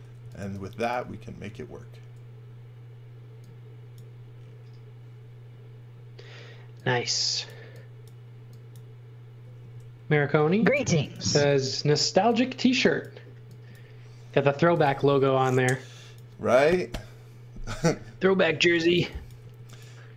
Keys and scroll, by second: 0.0-1.6 typing, 9.8 l, 11.2 space, 11.5 e, 14.3-15.3 typing, 18.6 x, 19.0 v, 19.4 space.